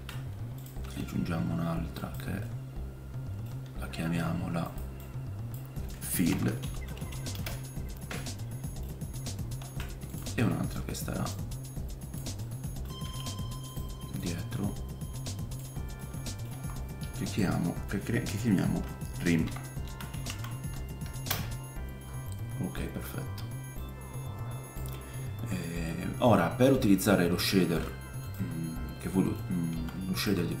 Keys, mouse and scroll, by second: 0.8 r, 2.4-8.2 right drag, 2.4 middle click, 4.0 F2, 8.2-10.1 middle drag, 9.6 shift+d, 10.1-12.4 right drag, 11.3-12.4 drag, 11.3-13.7 middle drag, 13.0 g, 13.7 click, 14.2-15.4 middle drag, 16.0 middle click, 16.5 F2, 19.5-23.8 shift+middle drag, 23.8 click, 25.6 click, 25.6 middle click, 25.6 right click, 26.0 click, 26.0-28.3 middle drag, 26.0 right click, 27.0 scroll up 2, 28.2 click, 28.2 right click, 28.6 scroll down 1, 28.7-29.7 middle drag, 29.7-30.6 drag, 29.7 g.